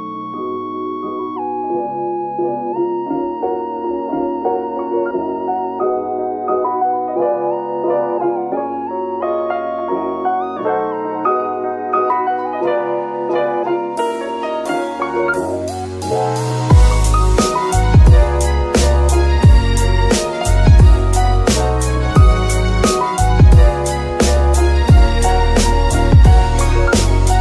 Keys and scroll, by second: 0.0-1.6 typing, 3.1-3.8 typing, 4.0 Return, 6.4 n, 14.0 KP_3, 16.9 z, 17.4 g, 18.3 s, 21.4 shift+s, 21.8 shift+g, 22.7 g, 23.9 g.